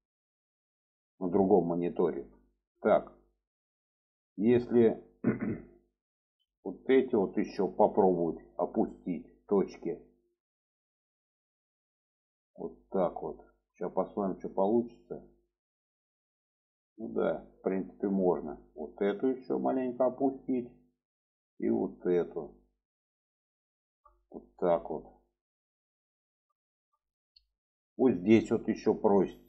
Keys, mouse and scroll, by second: 0.9-2.1 middle drag, 2.4 shift+middle click, 4.5-5.5 middle drag, 6.0-7.6 middle drag, 8.5 shift+middle click, 10.6 shift+click, 11.9 shift+click, 13.1 click, 14.6-15.7 middle drag, 17.0 middle click, 17.8 shift+middle click, 18.8 click, 19.2 click, 21.2 click, 21.6 click, 22.9 click, 23.7 shift+middle click, 24.4-25.4 middle drag, 26.6 shift+middle click.